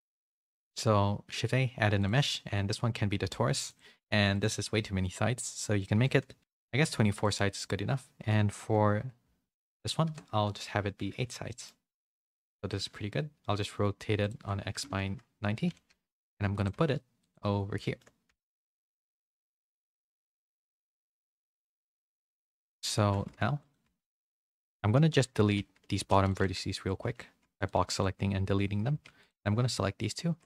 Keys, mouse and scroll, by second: 3.6 click, 7.4-10.2 drag, 11.5 middle click, 13.2 r, 14.8 KP_3, 15.8 s, 16.7 g, 17.8 shift+middle click, 18.2 s, 18.8 g, 19.6 s, 20.1 g, 21.3 z, 21.7 shift+middle click, 22.2 g, 23.2 s, 23.8 g, 24.2 Tab, 25.0-27.7 typing, 27.9 middle click, 29.1 2, 29.2 alt+click, 30.0 alt+shift+click.